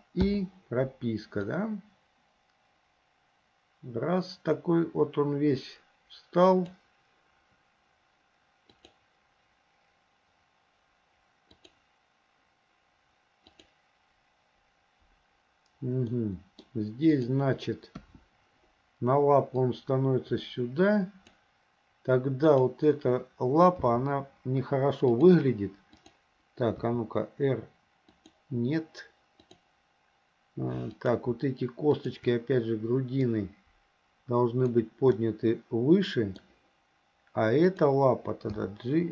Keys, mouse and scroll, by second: 0.3 i, 1.5-6.8 drag, 8.8 click, 11.6 click, 13.6 click, 16.2 middle click, 17.1 click, 18.0 KP_1, 19.7-21.4 drag, 22.5 click, 23.9 g, 26.1 click, 26.9 r, 29.4 click, 30.9 click, 31.9 shift+click, 33.3-34.8 drag, 35.2 scroll up 1, 35.4-36.4 middle drag, 37.7 click, 38.5 g.